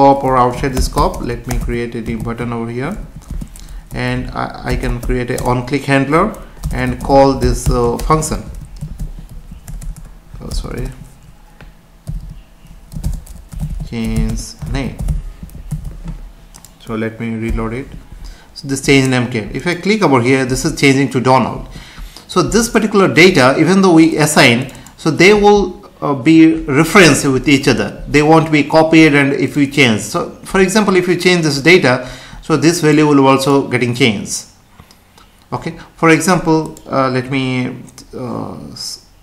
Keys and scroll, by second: 3.0 Left, 3.2 space, 5.4 Return, 8.8 ctrl+s, 10.5 BackSpace, 12.1 Right, 14.2 space, 15.7 ctrl+s, 17.4 F5.